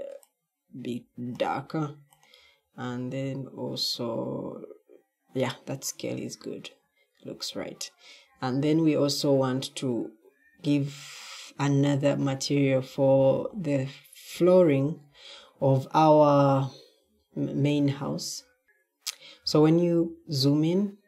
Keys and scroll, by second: 18.6 w, 19.3 w, 19.8 w.